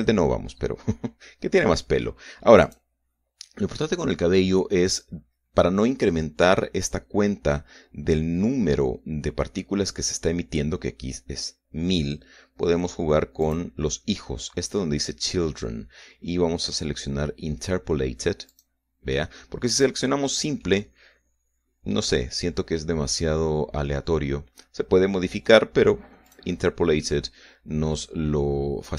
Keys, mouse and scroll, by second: 0.0-1.2 scroll up 1, 1.2-1.6 scroll down 1, 3.4 click, 6.0-6.7 scroll up 2, 12.4-12.9 scroll down 1, 14.2 click, 14.8-15.2 scroll down 1, 19.3 click, 20.5 click, 21.4-26.5 middle drag, 27.1 click, 27.8-28.9 middle drag.